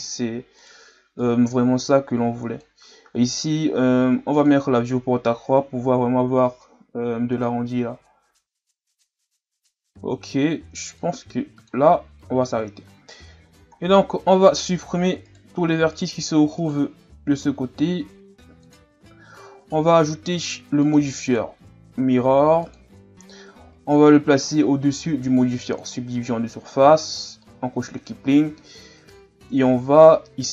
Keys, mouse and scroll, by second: 0.6 right click, 1.2-4.2 drag, 4.3-7.4 drag, 7.6-9.8 scroll down 1, 11.0 click, 11.9-12.5 scroll down 4, 12.5-13.8 scroll up 3, 13.8-15.2 scroll down 2, 15.2 scroll down 1, 15.3 right click, 15.9 shift+right click, 16.6 shift+right click, 17.9 x, 19.5 Tab, 20.8-21.3 drag, 22.8-24.3 drag, 25.0-25.8 drag, 27.2 click, 28.5 Tab, 29.4-29.8 ctrl+scroll up 1, 29.8 a.